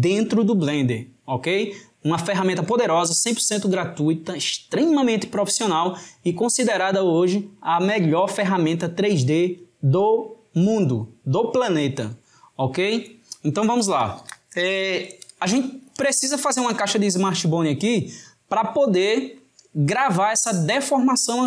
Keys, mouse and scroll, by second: 16.9-19.9 drag.